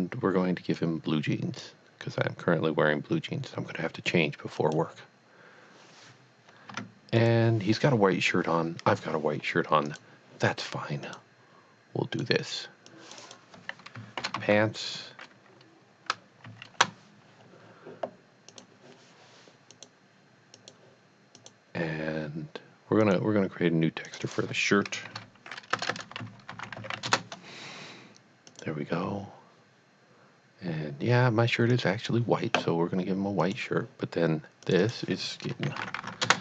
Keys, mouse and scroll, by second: 0.8 click, 4.6 click, 4.7 click, 7.2 click, 10.2 click, 11.1 click, 12.1 click, 12.9 click, 13.2 double click, 14.3-15.1 typing, 16.4 s, 17.6 Return, 18.5 click, 19.7 click, 20.5 click, 21.4 click, 23.0 click, 24.1 click, 24.3 double click, 25.1-27.0 typing, 27.1 Return, 28.5 click, 31.8 click, 33.4 click, 34.6 click, 34.8 double click, 35.7-36.2 typing, 36.2 Return.